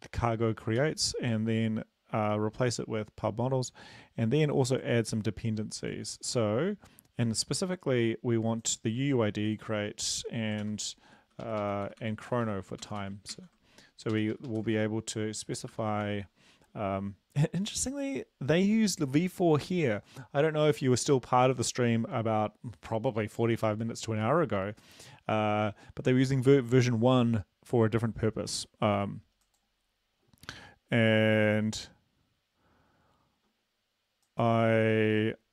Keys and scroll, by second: 0.8 ctrl+s, 10.6 ctrl+v, 11.1 Up, 11.3 Up, 11.4 Up, 11.6 Up, 11.8 Delete, 12.0 Delete, 12.3 Down, 12.9 Delete, 12.9 Down, 13.0 Delete, 13.3 ctrl+s, 14.2 Up, 14.3 Up, 14.5 Up, 14.8 shift+End, 14.8 shift+Delete, 15.7 BackSpace, 16.1 ctrl+s.